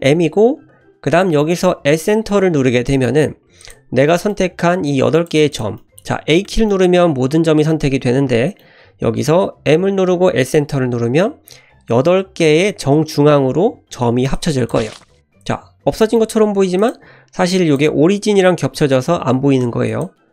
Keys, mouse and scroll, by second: 3.6 click, 4.1 middle click, 4.9 click, 5.5 click, 5.8 middle click, 6.4 a, 6.7-8.6 middle drag, 9.7 m, 13.7 m, 15.1-16.0 scroll up 1, 16.0-16.7 scroll up 2, 16.0 shift+middle click, 16.8 click, 17.6 click, 19.2 g.